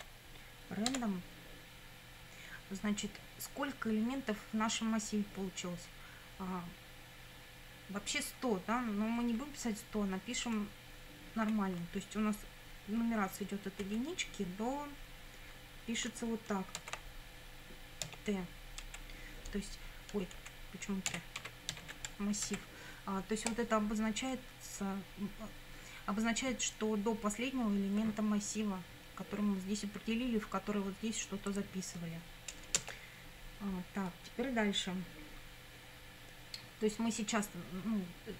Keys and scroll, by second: 0.9 Tab, 11.4 1, 13.8 ,, 16.8 shift+3, 18.1 t, 18.9 Right, 20.4 Left, 21.1 BackSpace, 21.4 a, 21.7 r, 22.5 Right, 32.8 Return.